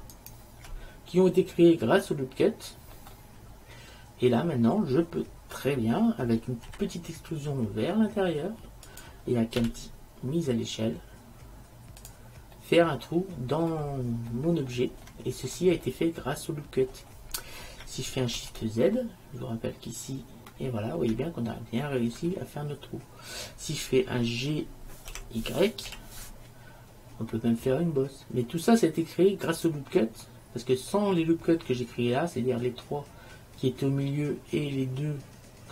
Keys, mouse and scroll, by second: 1.1 middle click, 6.7 e, 9.7 s, 15.7-17.3 middle drag, 18.6 shift+z, 25.2 g.